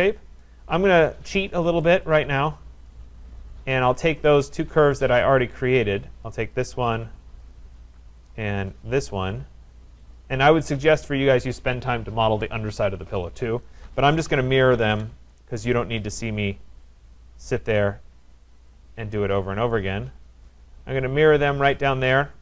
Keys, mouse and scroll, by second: 0.4 right click, 1.8 click, 2.9 click, 3.9 shift+click, 4.9 click, 5.6 right click, 6.4 click, 7.5 click, 9.2 click, 10.2 click, 10.8-11.4 scroll, 13.8-15.2 typing, 15.7 shift+right click, 16.9 click, 18.5 click, 18.7 click, 19.5 Return, 21.7 shift+click, 21.8 shift+click.